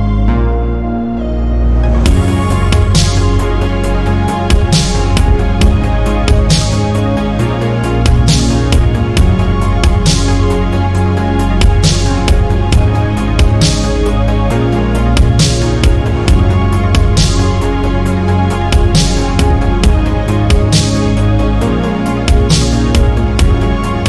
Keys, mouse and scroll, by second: 0.0 ctrl+r, 1.3 ctrl+r, 2.4 Tab, 2.6 scroll down 2, 2.8-3.9 middle drag, 3.9-4.4 scroll up 1, 4.4 middle click, 4.8 Tab, 6.0 shift+middle click, 6.4-7.1 scroll up 2, 6.6 middle click, 7.1 middle click, 7.5 1, 7.7 click, 8.3 g, 10.2 middle click, 10.8 click, 11.1 g, 12.2 middle click, 13.0 2, 13.3 click, 13.8 shift+click, 14.2 shift+click, 14.8 middle click, 15.4 click, 16.8 middle click, 17.5 ctrl+r, 18.7 middle click, 19.6 ctrl+r, 21.5 shift+middle click, 22.3 ctrl+z.